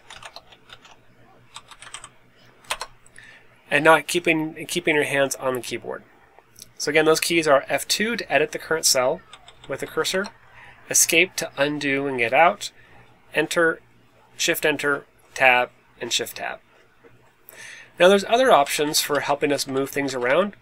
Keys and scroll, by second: 0.0-3.6 typing, 8.1-9.9 typing, 10.0 Return, 18.5 Left, 19.0 super+Left, 19.6 Left, 20.0 Down.